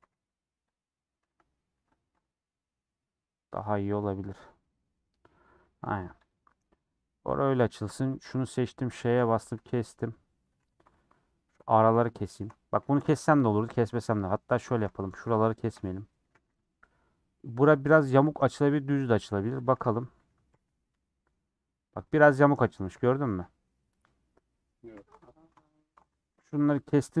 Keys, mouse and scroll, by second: 0.0 g, 1.2 a, 2.0 u, 5.0 scroll down 1, 5.2 scroll up 1, 5.3-5.6 scroll down 7, 5.7 middle click, 6.1 click, 6.4-7.0 scroll up 6, 6.6 middle click, 7.2 middle click, 8.8 ;, 9.2 middle click, 9.6 scroll up 2, 11.5 middle click, 12.3 alt+shift+click, 13.5 middle click, 13.9 2, 14.2 Left, 14.9 middle click, 15.6 alt+shift+Left, 16.2 a, 16.4 u, 17.0 scroll down 4, 19.6 click, 19.7 3, 20.4 l, 22.9 middle click, 23.1 scroll up 1, 23.4 middle click, 24.1 scroll up 3, 24.5 middle click, 24.8 2, 27.0 a.